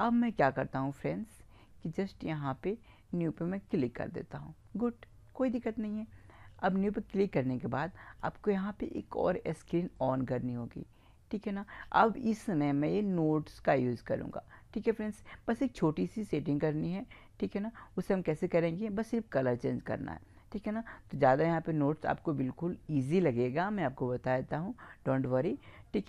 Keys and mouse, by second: 0.8-2.7 drag, 3.2-5.0 drag, 6.7-8.4 drag, 10.0-11.0 drag, 26.0 click.